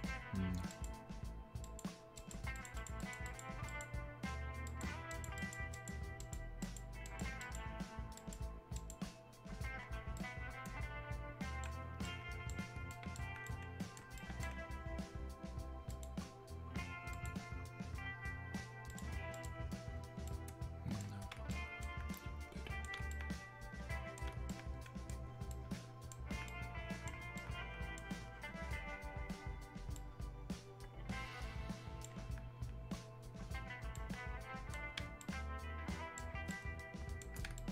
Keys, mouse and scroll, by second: 10.2-14.2 right drag, 15.9 click, 20.3-25.5 right drag, 25.5-29.9 alt+right drag, 29.9-37.7 alt+right drag.